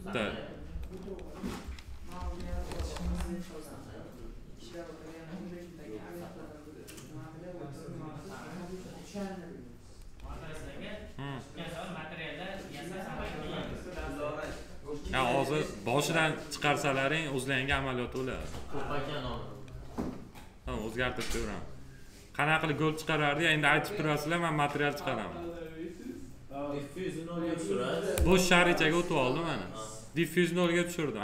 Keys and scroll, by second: 2.2 ctrl+s.